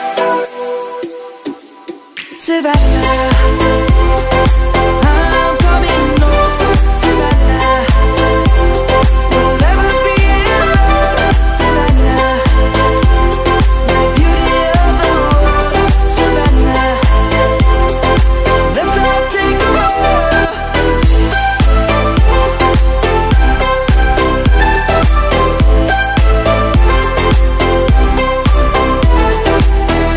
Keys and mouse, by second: 0.3 shift+f, 1.3-5.4 typing, 7.2 BackSpace, 8.2 e, 8.3 r, 10.9 click, 19.7 middle click.